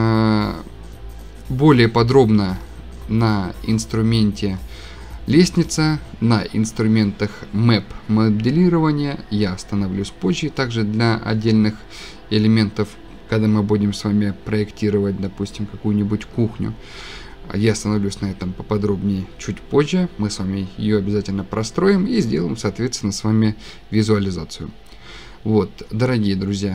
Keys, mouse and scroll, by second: 2.2 scroll, 2.2 scroll down 3, 2.5 scroll, 2.6-3.5 scroll down 14, 3.5-6.9 scroll, 8.9 scroll, 9.2-9.7 scroll down 14, 24.8-25.4 scroll.